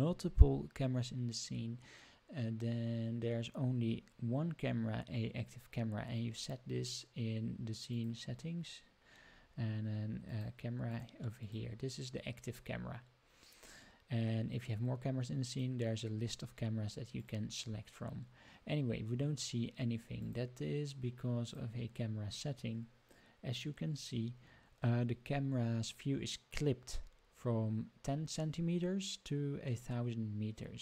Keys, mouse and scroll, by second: 7.9 click, 10.2-11.5 drag, 15.4-17.2 drag, 20.1 click, 21.4 click.